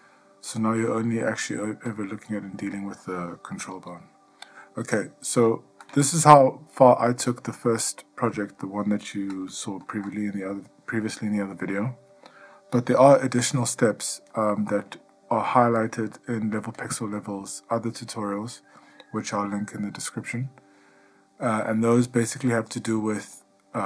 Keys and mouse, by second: 0.8-1.4 middle drag, 2.1 click, 3.9 g, 10.0 Escape, 14.6-15.0 shift+middle drag, 15.3-16.0 ctrl+middle drag, 18.3-19.1 shift+middle drag, 22.8-23.3 ctrl+middle drag, 23.6-23.8 shift+middle drag.